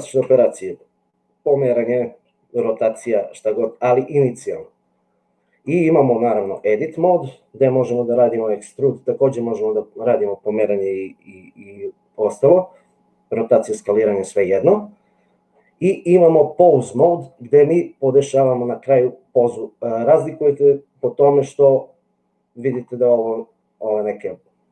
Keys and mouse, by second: 0.3 g, 5.7 click, 16.2 click.